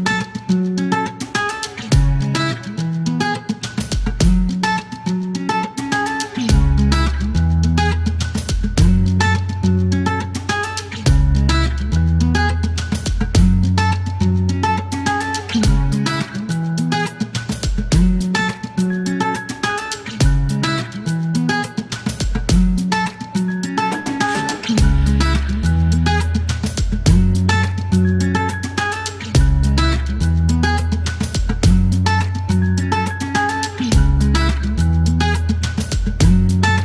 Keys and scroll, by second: 17.5 typing, 21.2 ctrl+a, 22.1 alt+q, 22.9 alt+u, 22.9 alt+n, 25.8 typing, 26.3 ctrl+z, 28.1 typing, 32.1 c, 32.9 shift+g, 33.2 Delete, 35.6 ctrl+a, 36.6-36.8 typing.